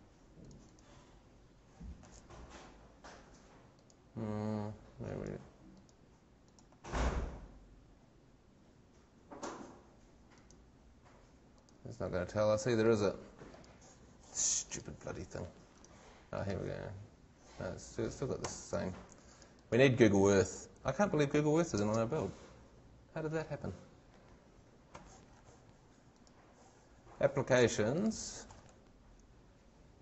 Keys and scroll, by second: 18.0 shift+Scroll_Lock, 21.8 shift+super+space, 25.0 shift+Escape.